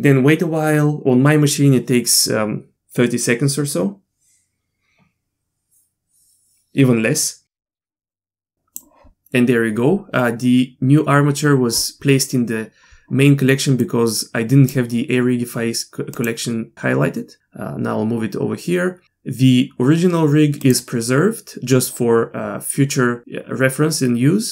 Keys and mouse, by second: 8.1-8.8 drag, 13.8-14.7 drag, 16.1 click, 20.6 click.